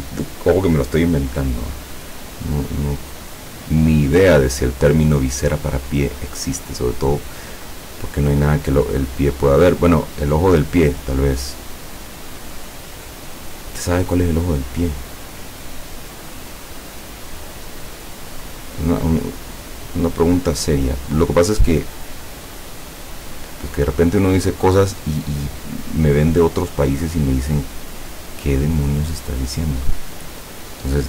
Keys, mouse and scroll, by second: 5.9 click, 8.4 click, 18.5 click, 20.9 click, 28.3 click, 30.1 click.